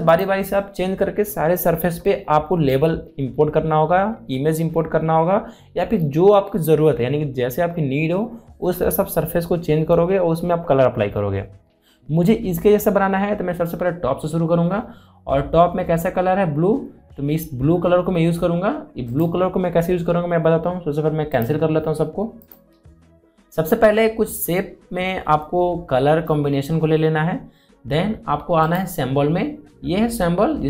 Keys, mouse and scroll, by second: 0.8 click, 19.9 click, 29.4 click.